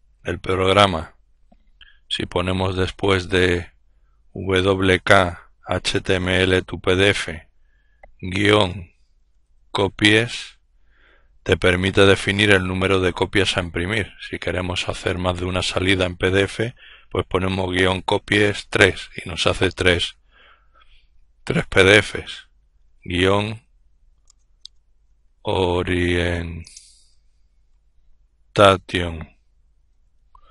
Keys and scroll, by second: 7.6 typing, 9.0-9.7 typing, 22.3-23.2 typing, 24.8-30.0 typing.